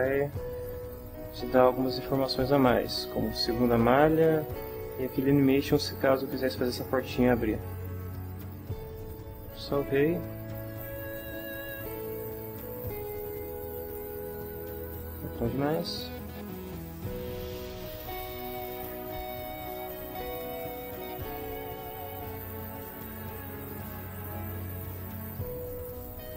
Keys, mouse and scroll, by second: 3.4 click, 9.3 ctrl+s, 10.6 click, 12.9 click, 15.1 click, 17.5 click, 20.3 shift+middle click, 21.3-22.5 drag, 23.7-25.9 drag.